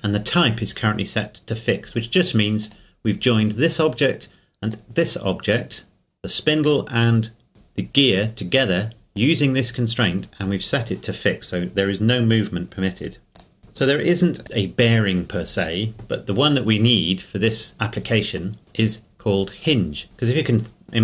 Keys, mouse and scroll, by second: 2.6 right click, 9.2 right click, 13.4 click, 19.6 click.